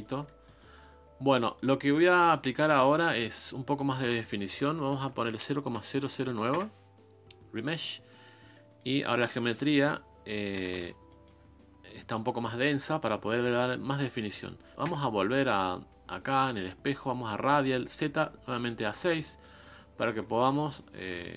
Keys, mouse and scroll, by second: 0.0 shift+middle click, 0.3 scroll down 2, 0.4-6.5 middle drag, 6.5 Delete, 8.5-9.8 middle drag, 9.8 shift+click, 10.7 ctrl+z, 11.1-20.4 middle drag, 20.4 shift+click, 21.2 middle click.